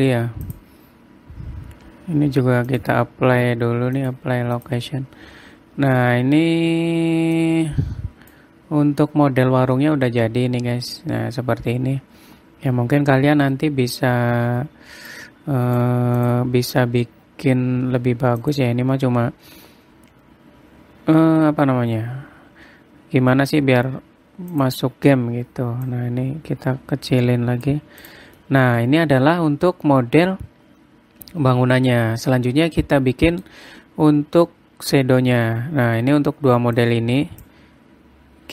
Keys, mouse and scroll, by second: 1.0 click, 3.2 click, 4.5 click, 6.0 scroll up 3, 6.5-7.0 scroll down 3, 7.9 click, 9.2-9.6 scroll up 2, 10.3 middle click, 14.3 scroll up 2, 15.7 click, 16.8 click, 18.3-19.0 scroll down 5, 19.0 click, 19.7-21.5 scroll down 6, 22.0-23.1 scroll up 14, 23.1-24.4 scroll down 22, 25.1 click, 28.6 click, 29.0 middle click, 29.5 scroll up 1, 29.8 scroll down 1, 32.6-33.2 scroll down 1, 33.2 middle click, 37.3 click.